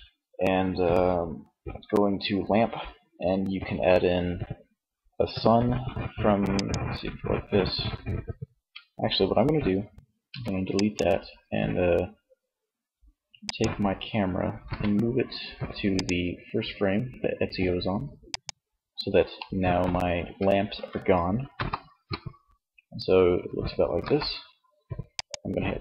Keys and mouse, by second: 9.3 x, 12.7-13.7 right drag, 13.7 m, 17.4-18.4 right drag, 18.4-20.8 middle drag, 20.8 KP_0, 23.0 KP_0, 24.2-25.8 drag.